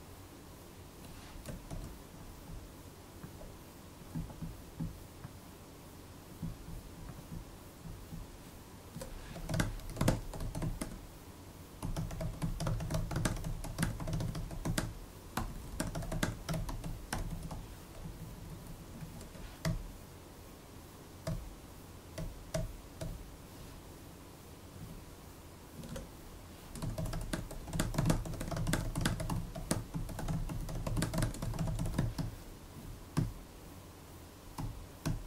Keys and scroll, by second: 1.6 shift+super+d, 8.8 Return, 9.0-17.9 typing, 17.9 alt+Left, 18.1 alt+Left, 18.2 alt+Left, 18.9 alt+shift+Right, 19.5 super+u, 21.1 super+u, 22.9 super+u, 24.7 super+Right, 25.6 Return, 25.8 Return, 26.4-32.5 typing, 33.0 shift+super+l, 34.4 shift+super+l.